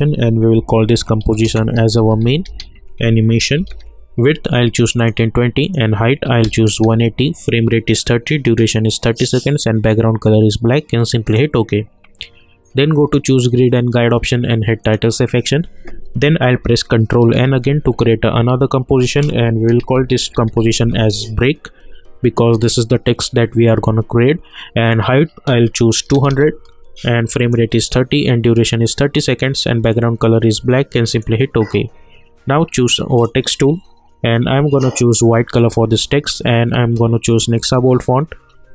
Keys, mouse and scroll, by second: 0.3-4.1 typing, 5.0 click, 11.2 click, 17.3 ctrl+n, 19.8-21.3 typing, 24.9 click, 27.4 click, 31.1 click.